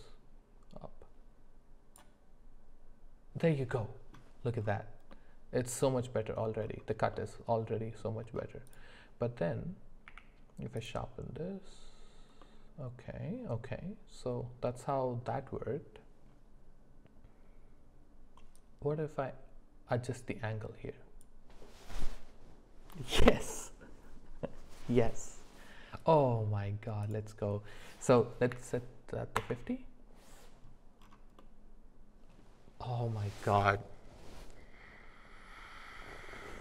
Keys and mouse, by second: 5.1-6.4 middle drag, 7.1-8.0 middle drag, 8.7 click, 10.1 q, 12.4-15.2 middle drag, 18.5-21.3 drag, 27.0-29.5 drag, 31.4-32.4 middle drag.